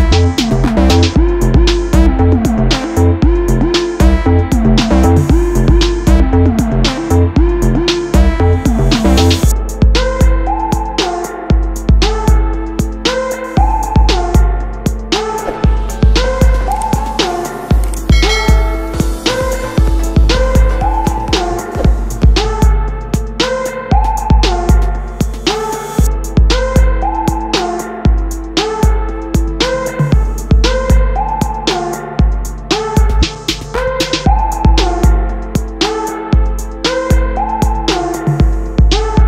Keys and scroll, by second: 0.7 Left, 1.0 Right, 1.6 Return, 11.8 ctrl+Tab, 12.4 ctrl+w, 12.9 Tab, 15.8 space, 26.8 ctrl+], 28.7 ctrl+t.